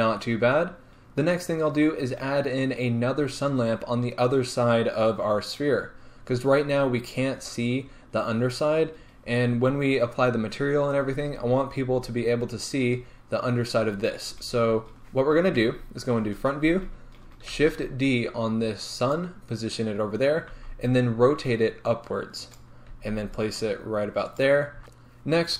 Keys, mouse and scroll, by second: 0.5 scroll down 1, 5.8 scroll down 1, 6.3 scroll up 1, 9.3-11.4 scroll down 1, 12.7 scroll up 1, 14.3 scroll down 1, 15.7 KP_1, 17.6 shift+d, 19.2 click, 20.6 r, 22.6 click, 23.0 g, 24.5 click, 24.8 KP_1.